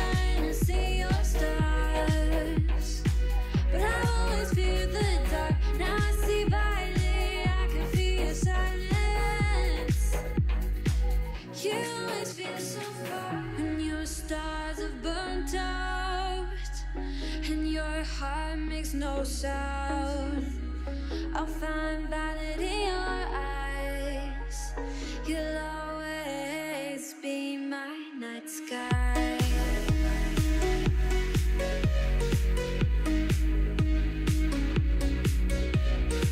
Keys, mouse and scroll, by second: 0.0-0.5 middle drag, 0.5 click, 0.9 click, 1.4 alt+click, 1.7 shift+middle click, 1.8 scroll up 1, 2.1 alt+z, 2.3 click, 3.1-3.5 middle drag, 3.5 c, 4.0 middle click, 4.2 alt+z, 4.4 scroll down 1, 4.6 g, 5.4 click, 6.2 alt+click, 6.6 g, 7.7-8.3 shift+middle drag, 8.3 ctrl+r, 9.3 ctrl+r, 10.2 scroll down 2, 10.3-11.2 middle drag, 11.2 ctrl+l, 12.1 3, 12.3 l, 12.6 KP_3, 13.5 click, 13.9 alt+z, 14.3 shift+d, 17.7 shift+middle click, 18.1-19.2 scroll up 2, 19.2 alt+z, 19.5 middle click, 19.9 alt+z, 20.8 3, 21.3 c, 24.3-25.0 scroll down 1, 25.0 middle click, 25.3-25.8 scroll up 1, 25.8 KP_3, 26.0-26.9 scroll up 4, 26.2 shift+middle click, 26.9 c, 31.4 middle click, 32.2 c, 33.5 scroll down 2, 33.7-34.3 middle drag, 34.3-34.9 scroll down 3, 34.9 KP_3, 35.4 e.